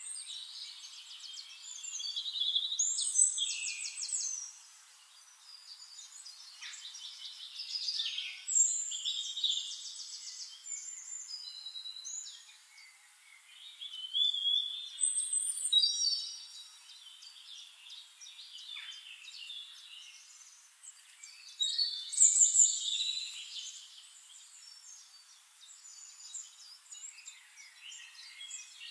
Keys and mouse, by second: 3.6 click, 5.1 click, 9.2 click, 10.4-17.5 drag, 19.3-21.8 drag, 21.4 ctrl+z, 21.8 ctrl+z, 22.3-24.3 shift+right drag, 23.2 click, 23.2-24.3 middle drag, 24.7 click, 26.8 click, 28.0-28.9 drag.